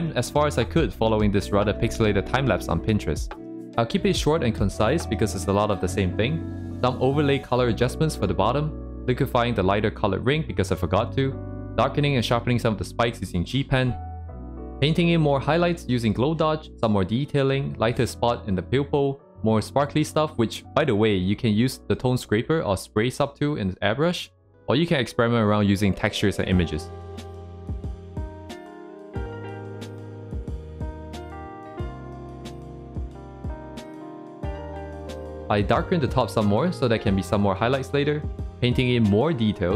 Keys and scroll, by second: 3.4 ctrl+z, 7.6 ctrl+z, 9.7 ctrl+z, 10.2 ctrl+z, 11.3 ctrl+z, 12.3 ctrl+z, 13.0 ctrl+z, 14.9 ctrl+z, 15.7 ctrl+z, 16.1 ctrl+z, 16.5 ctrl+z, 17.6 c, 17.7 ctrl+z, 17.8 c, 18.1 ctrl+z, 18.3 c, 19.9 ctrl+z, 20.8 ctrl+z, 22.5 ctrl+z, 24.3 ctrl+z, 25.2 c, 28.1 c, 28.6 ctrl+z, 28.8 ctrl+z, 29.2 ctrl+z, 29.6 ctrl+z, 31.2 ctrl+z, 31.9 ctrl+z, 32.7 ctrl+z, 34.4 ctrl+z, 37.9 ctrl+z, 39.0 c, 39.3 ctrl+z, 39.3 ctrl+z, 39.7 ctrl+z.